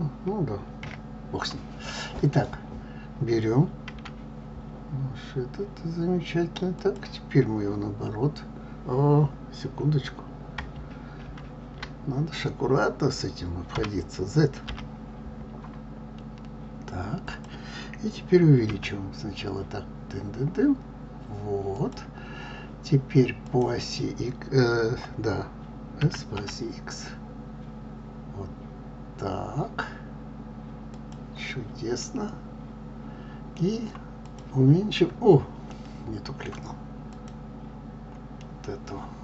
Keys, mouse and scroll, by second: 3.9 g, 23.4 click, 26.0 s, 32.0-34.1 middle drag, 34.1 click, 35.7-37.1 middle drag, 37.1 click, 38.4-39.2 middle drag.